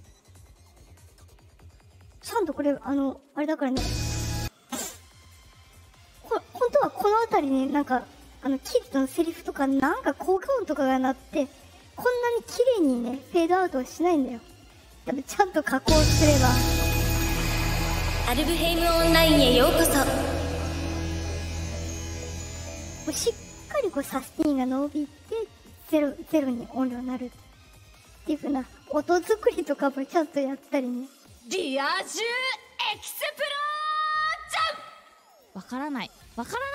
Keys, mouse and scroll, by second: 3.6 click, 13.7-15.6 drag, 15.7 space, 18.4 click, 27.2 space, 28.1 right click, 31.2 click, 33.5 click, 35.2 click.